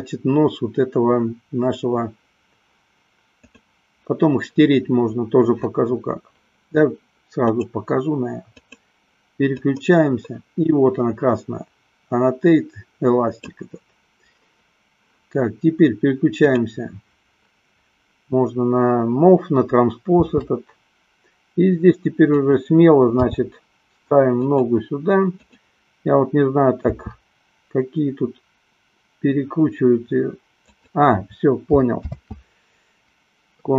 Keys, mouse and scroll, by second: 3.4 click, 7.5 click, 8.5 click, 9.6-13.4 drag, 16.5 click, 20.2 r, 22.6 click, 23.4 g, 25.5-26.6 drag, 27.1 r, 32.9 ctrl+z.